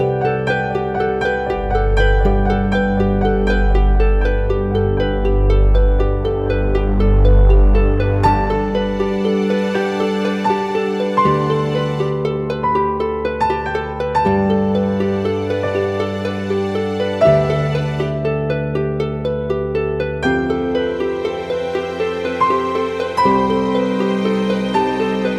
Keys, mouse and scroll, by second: 1.1 double click, 24.8 double click.